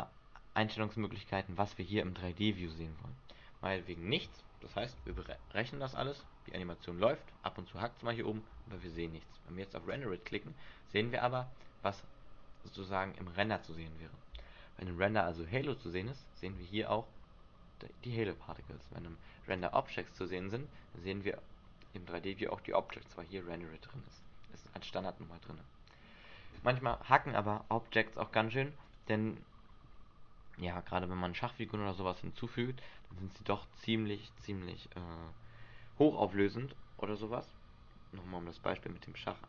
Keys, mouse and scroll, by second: 4.0 click, 5.2 alt+a, 9.0 alt+a, 10.1 click, 10.6-11.2 scroll down 3, 11.2 middle click, 12.2 scroll up 3, 13.7 click, 19.7 click, 24.3 click, 29.0 click.